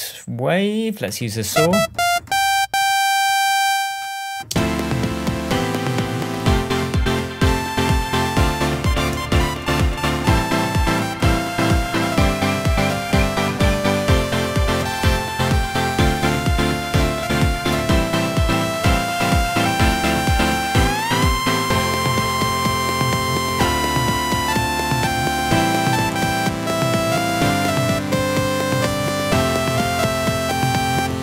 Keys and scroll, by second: 4.4 space.